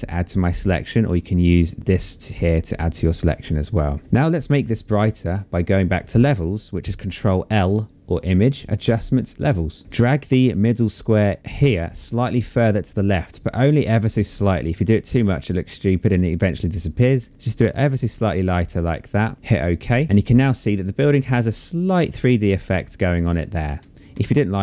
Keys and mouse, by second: 7.0 click, 9.9 click, 19.3 click, 23.2 ctrl+z.